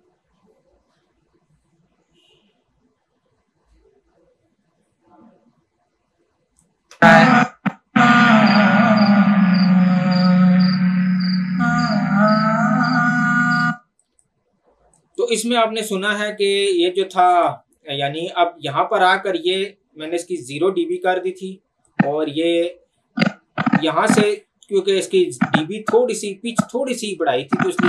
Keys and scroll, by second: 6.9 space, 13.6 space.